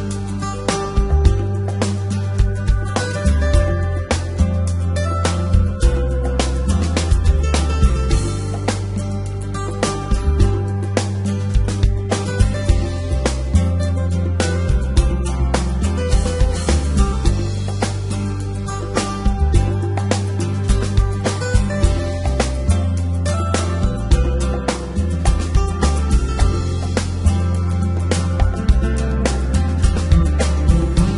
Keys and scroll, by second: 0.9 s, 1.7 y, 5.2 s, 5.8 y, 14.8 x, 25.7 e, 27.5 g, 28.3 x.